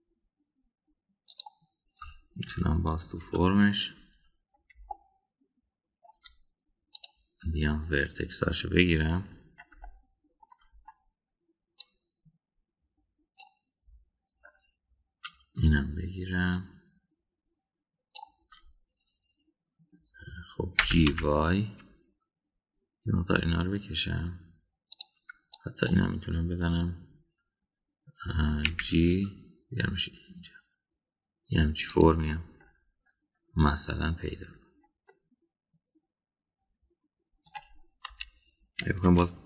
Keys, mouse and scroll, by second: 3.5 KP_1, 4.0 KP_3, 5.9-7.1 shift+middle drag, 7.1 shift+scroll down 1, 8.0 click, 10.8-11.6 shift+middle drag, 12.8 click, 17.5 shift+click, 21.8 g, 26.6 click, 29.7 g, 36.1-38.5 middle drag, 39.0 KP_1.